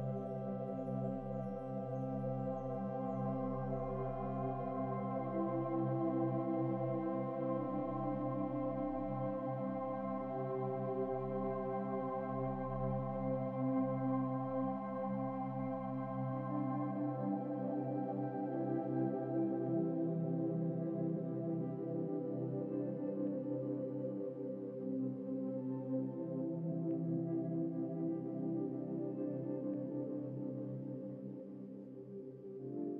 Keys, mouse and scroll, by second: 0.4 scroll up 2, 1.1 scroll up 1, 1.4-2.5 shift+middle drag, 2.5 click, 3.7-4.1 scroll down 3, 4.1-4.6 scroll up 1, 4.6 scroll up 2, 4.6-5.6 scroll down 4, 6.8-8.3 middle drag, 8.3 click, 9.0-9.4 middle drag, 9.4-9.8 scroll up 10, 9.8-11.8 middle drag, 11.8 s, 13.5-16.7 drag, 18.0-18.9 scroll down 8, 18.9-19.3 middle drag, 19.3-20.0 scroll up 5, 20.0 scroll down 3, 20.3-20.8 middle drag, 20.8 scroll down 2, 21.0-23.1 middle drag, 24.1 click, 24.3-25.9 scroll up 8, 27.8-28.9 scroll up 5, 29.5 Tab, 30.2 Tab, 31.0-32.4 scroll down 15.